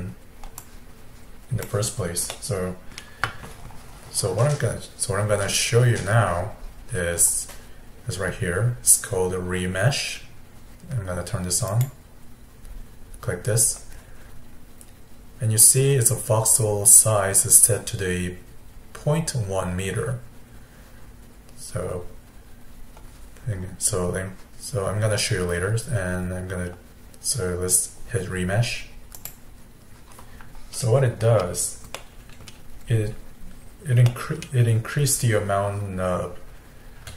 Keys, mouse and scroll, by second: 2.3-5.5 middle drag, 11.7-14.8 drag, 31.2-31.6 scroll up 3, 32.0 middle click, 32.8-33.5 scroll up 2, 33.5-34.1 scroll down 2, 34.1-37.0 middle drag, 37.0 f.